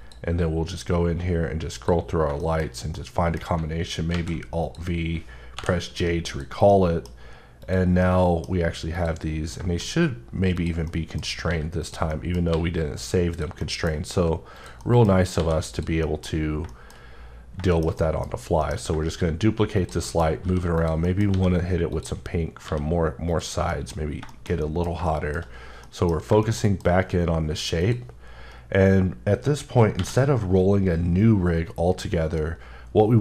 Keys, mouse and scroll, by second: 0.4-1.0 scroll up 2, 1.8 click, 2.0-3.0 scroll down 5, 2.4 shift+middle click, 2.9 middle click, 4.1 alt+v, 4.6 click, 5.5 j, 6.3 click, 6.7 middle click, 7.6 click, 8.0 middle click, 8.9 click, 9.7 d, 10.5 click, 10.9 middle click, 11.2 scroll up 1, 11.5 g, 11.8 click, 12.1 middle click, 12.5 g, 13.3 click, 13.6 middle click, 13.8 scroll down 2, 14.1 g, 14.6 click, 14.8 middle click, 15.1 scroll, 15.3 g, 15.7 click, 15.9-16.5 scroll up 2, 16.0 middle click, 16.7 shift+middle click, 17.0-17.6 scroll down 2, 17.6 shift+middle click, 18.2-18.8 scroll down 5, 19.1 d, 19.8 click, 20.0 middle click, 20.4 g, 20.8 click, 21.1 middle click, 21.3 g, 21.9 click, 22.3-22.6 scroll up 2, 22.6 g, 23.3 click, 23.6-24.0 scroll up 2, 23.7 middle click, 24.3 shift+middle click, 25.4 scroll up 2, 25.8 middle click, 26.2 scroll down 2, 26.8 shift+middle click, 27.0 middle click, 27.8 click, 30.0 v.